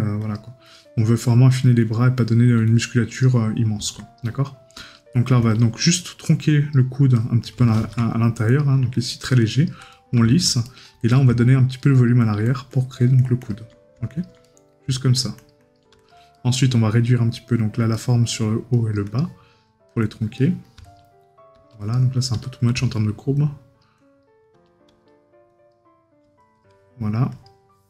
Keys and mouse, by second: 7.1 right click, 9.9 right click, 14.4 right click, 16.3 right click, 17.9 right click, 20.4 right click, 21.9 right click.